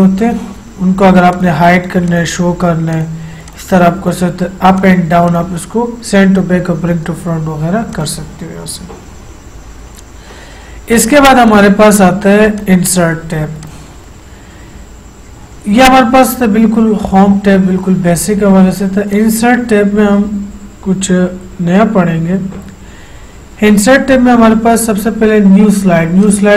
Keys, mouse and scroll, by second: 8.0 click, 11.6 click, 16.3 click, 19.3 click, 26.3 click, 26.4 click.